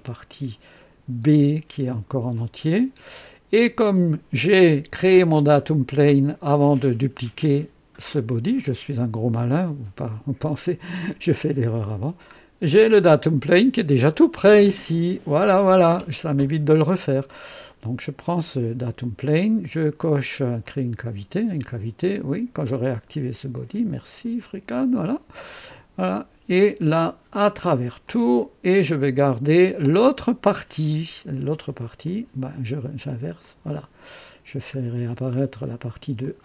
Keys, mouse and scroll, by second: 0.7 click, 1.2 space, 2.3 click, 11.3 click, 11.8-12.2 scroll down 1, 12.2 middle click, 12.9 click, 15.8-17.8 drag, 20.6 click, 22.0 click, 23.3 click, 24.4 click, 25.6 click, 27.3 click, 28.0 click, 32.0 click, 33.4 click, 34.6 scroll up 1, 36.2 click.